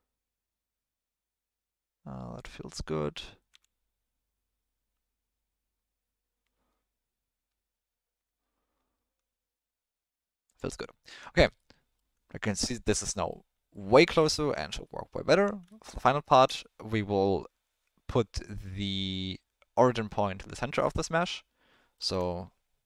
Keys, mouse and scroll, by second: 3.5 s, 11.1 Tab, 11.6-12.0 ctrl+middle drag, 13.1 ctrl+middle click, 13.8 ctrl+middle drag, 15.3 Tab, 15.7 ctrl+middle click, 20.9-21.9 ctrl+middle drag.